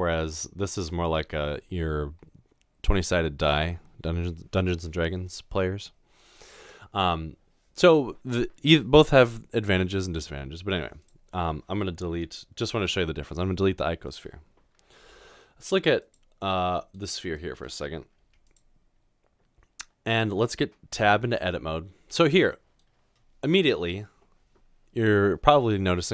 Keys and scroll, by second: 13.6 Delete, 15.0 s, 18.2 typing.